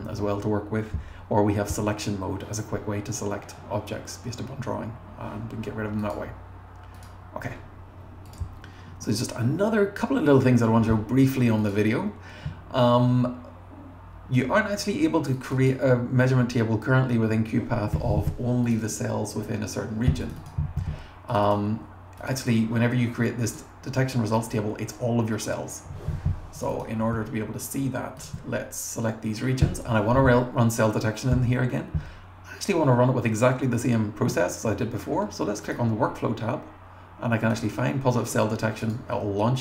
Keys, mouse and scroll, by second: 8.3 click, 10.5 scroll up 1, 11.6 click, 15.3 click, 15.5 click, 18.6 click, 18.8 click, 20.2 click, 20.4 click, 21.3 click, 21.5 click, 22.2 click, 22.3 click, 23.4 click, 26.6 click, 26.7 click, 28.2 alt+click, 35.7 click, 37.4 click, 37.6 click, 38.8 click.